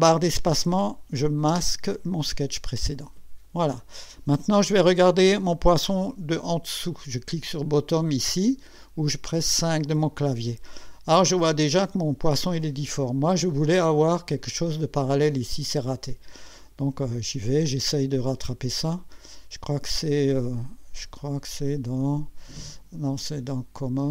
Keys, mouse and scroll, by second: 1.5 space, 9.3 5, 11.3 scroll up 2, 11.7-12.4 right drag, 16.6 click, 23.5 click.